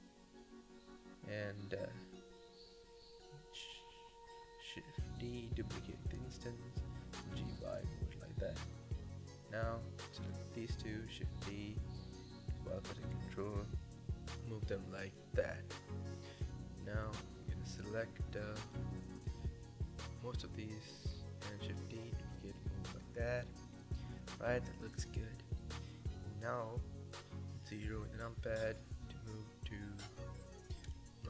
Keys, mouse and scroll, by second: 0.0-1.1 middle drag, 1.1-2.0 scroll down 8, 2.0 click, 2.3-3.1 middle drag, 3.1 click, 4.0-4.6 middle drag, 4.6-5.0 scroll down 5, 5.0 middle click, 5.6 shift+d, 6.5 g, 7.8-9.0 shift+middle drag, 9.0 shift+click, 9.7 shift+d, 10.2 g, 11.8-12.3 scroll down 4, 12.3 shift+middle click, 12.8 shift+d, 13.0 g, 14.6 shift+middle click, 15.0 shift+d, 15.4 g, 17.3-17.8 middle drag, 17.8 shift+drag, 18.1 shift+click, 18.4 shift+click, 18.9 shift+click, 19.6 shift+d, 20.4 g, 22.2-23.2 shift+middle drag, 23.2 click, 23.4 scroll down 6, 23.6-24.2 middle drag, 24.2-24.5 scroll up 4, 24.5-26.5 middle drag, 26.9 KP_0, 27.8 scroll up 7, 28.5-29.0 scroll down 6, 29.0 ctrl+s.